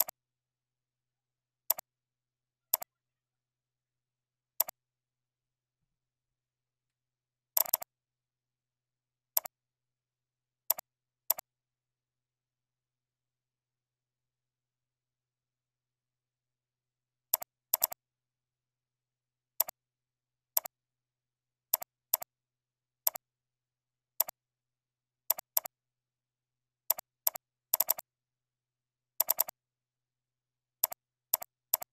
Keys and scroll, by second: 1.2 ctrl+b, 23.7 ctrl+e, 26.6 ctrl+b.